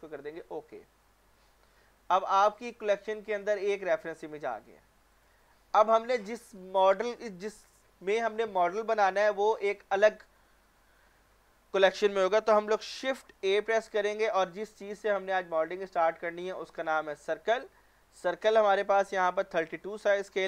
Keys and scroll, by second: 13.4 a.